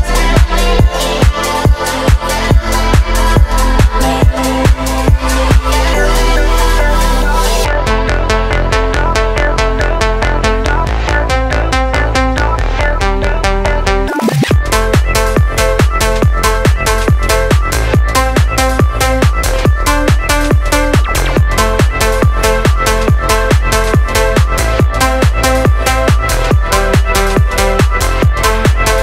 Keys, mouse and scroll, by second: 0.5 space, 1.8 click, 2.7-3.2 scroll up 2, 3.4-3.9 middle drag, 4.4-5.3 drag, 5.5 middle click, 5.9 click, 11.1 click, 11.4 shift+a, 13.8-15.2 drag, 15.6 click, 16.2 click, 21.0 middle click, 21.5 scroll up 1, 22.0 shift+middle click, 23.4-24.3 drag, 24.6 shift+middle click, 25.2 click, 25.8 ctrl+t, 26.1 middle click, 27.7-28.1 drag, 28.6 middle click.